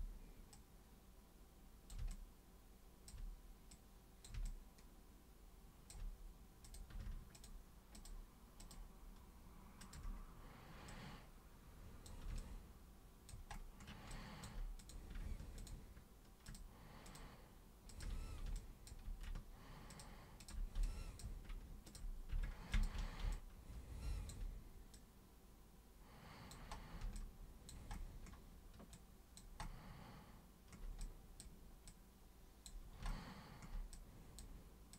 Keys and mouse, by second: 0.5-1.9 super+drag, 2.1-3.0 alt+drag, 3.7 click, 4.5-5.9 alt+drag, 6.7 click, 7.3 ctrl+shift+click, 8.0 ctrl+shift+super+click, 8.6 ctrl+shift+super+click, 9.8 ctrl+shift+super+click, 10.9 super+click, 12.4 alt+super+click, 14.1 alt+super+click, 14.8 super+click, 15.6 ctrl+shift+super+click, 16.4 ctrl+shift+super+click, 17.1 ctrl+shift+super+click, 17.9 ctrl+shift+super+click, 18.6 alt+super+click, 19.9 ctrl+super+click, 20.4 ctrl+super+drag, 20.9 alt+super+click, 21.9 ctrl+super+click, 22.7 ctrl+shift+super+click, 23.3-24.3 alt+super+drag, 24.9 super+click, 27.2 alt+super+click, 28.9 alt+super+click, 31.0-31.4 super+drag, 31.9 super+click, 34.0-34.4 super+drag.